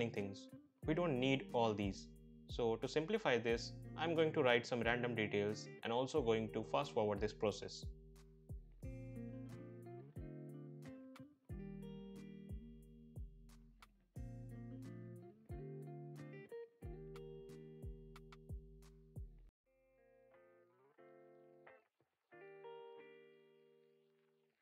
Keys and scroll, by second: 9.7-10.1 typing, 11.4 shift+Up, 14.0 ctrl+v, 14.7 BackSpace, 15.5 l, 15.6 r, 15.6 e, 15.7 Return, 17.3 ctrl+v, 17.5 ctrl+a, 18.1 BackSpace, 18.2 1, 18.2 8, 18.3 Return, 21.9 BackSpace, 22.0 3, 22.1 0, 22.2 Return.